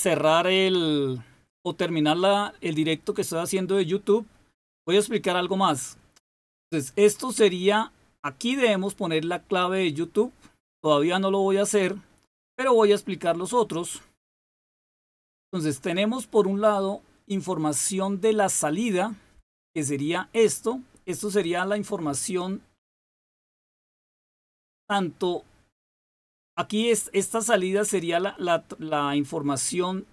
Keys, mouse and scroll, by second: 14.7 click.